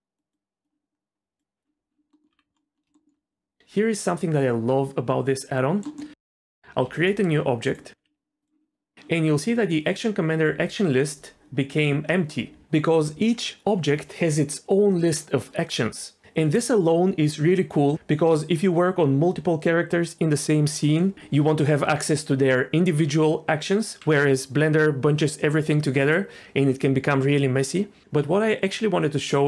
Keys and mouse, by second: 0.2 click, 0.6 click, 2.1 middle click, 2.3 Tab, 2.9 shift+middle click, 5.9 middle click, 6.1 shift+a, 6.8 shift+a, 8.0 g, 8.4 click.